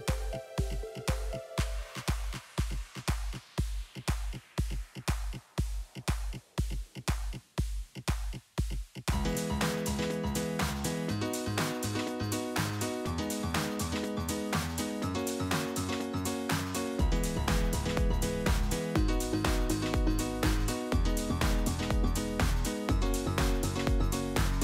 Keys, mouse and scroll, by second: 0.0 ctrl+r, 4.2-5.1 middle drag, 5.1-5.4 scroll down 1, 5.4 click, 8.1 click, 8.3 middle click, 8.8 click, 9.0 Tab, 9.8 click, 10.2 KP_3, 11.5 click, 13.0 click, 13.7 s, 15.3 Tab, 16.3 click, 17.0 Tab, 18.2 s, 20.2 click, 21.4 s, 22.9 click, 23.4 Tab, 23.8-24.3 middle drag, 24.3 scroll down 3, 24.5-24.6 shift+middle drag.